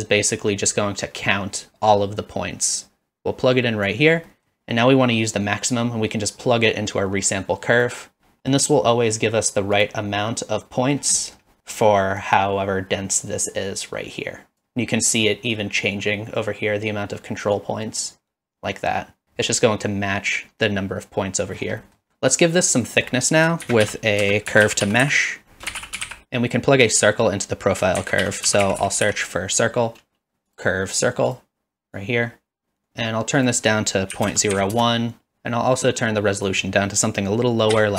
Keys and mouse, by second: 2.8-3.9 drag, 4.3 middle click, 4.6-7.9 drag, 8.4 middle click, 8.9 middle drag, 11.2 middle click, 12.3-14.6 drag, 17.7-19.2 drag, 21.8 middle click, 23.0 shift+click, 23.7 shift+a, 28.0 shift+a, 32.0-32.9 drag, 33.4-35.4 drag, 36.5-37.9 drag.